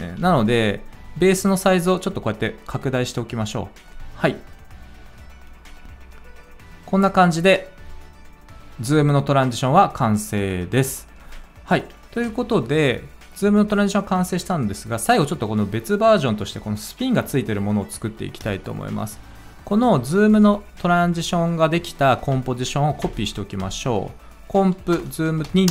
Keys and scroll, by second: 0.1 s, 5.8 ctrl+a, 5.8 ctrl+s, 5.8 space, 12.0 space, 22.9 ctrl+d, 24.8 Return, 25.3 Down, 25.6-25.7 typing.